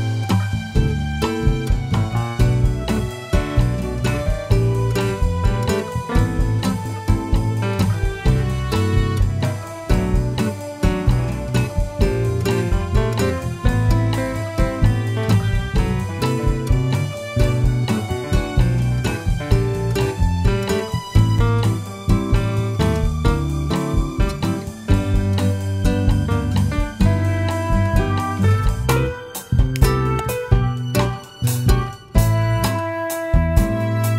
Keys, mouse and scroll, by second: 1.9-2.5 scroll up 1, 2.5-3.8 shift+middle drag, 3.8 click, 4.9 click, 5.6 click, 7.3-8.6 scroll down 1, 9.0 scroll up 1, 9.7 click, 10.4 click, 11.1-12.4 scroll down 1, 12.4 click, 13.2-18.6 drag, 15.6 BackSpace, 17.2 Return, 22.8 click, 24.5 drag, 25.5 click, 29.4-34.1 drag, 31.1 KP_Enter, 32.6 scroll up 1, 33.5-34.1 scroll down 1.